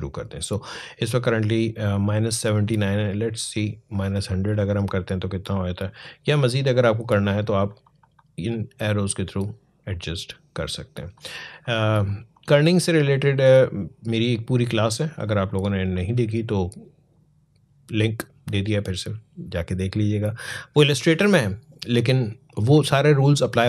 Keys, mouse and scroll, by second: 3.2 click, 6.8 click, 20.2 click.